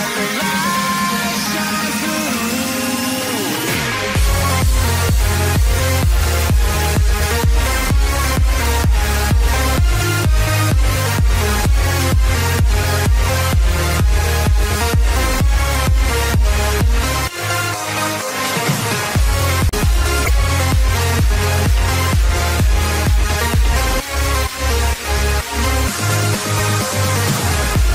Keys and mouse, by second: 0.2 KP_0, 1.0 Return, 3.0 space, 5.5 click, 7.1 click, 7.7 click, 8.9 ctrl+shift+c, 8.9 click, 10.5 click, 12.1 click, 13.0-16.0 typing, 16.8 click, 18.7 c, 23.4-27.9 typing, 26.5 Return.